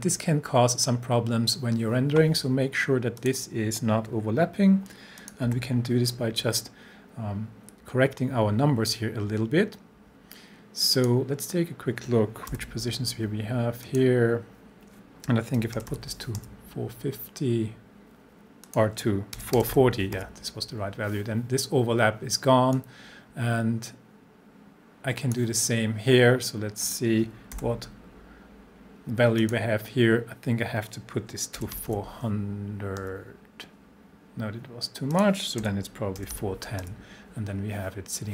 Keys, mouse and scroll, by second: 3.2 click, 3.2 click, 5.5 p, 11.0 click, 12.5 p, 13.8 click, 15.3-16.4 typing, 18.6 click, 19.1-20.2 typing, 22.7-25.5 drag, 27.5 p, 29.4 click, 31.5-32.4 typing, 35.1 click, 35.6-36.8 typing.